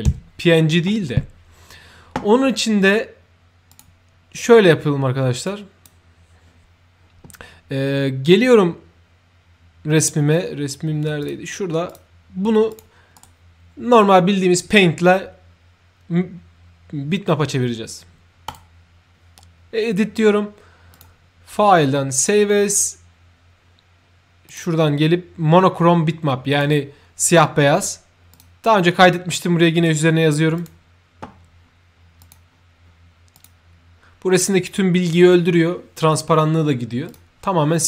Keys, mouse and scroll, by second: 3.6 click, 5.4 click, 11.1 click, 11.8 click, 12.6 click, 13.1 right click, 18.4 click, 20.9 click, 22.1 click, 24.4 click, 26.4 click, 28.2 click, 29.7 click, 30.5 click, 32.1 click, 33.2 click, 37.0 click.